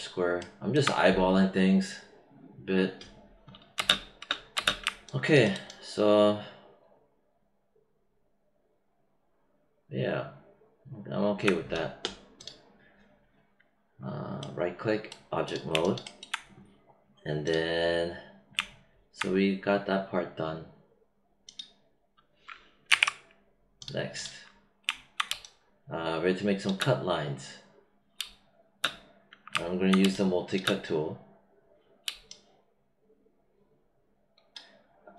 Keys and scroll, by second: 3.7 space, 22.8 ctrl+/, 25.2 space, 28.1 space, 29.9 space, 32.0 space.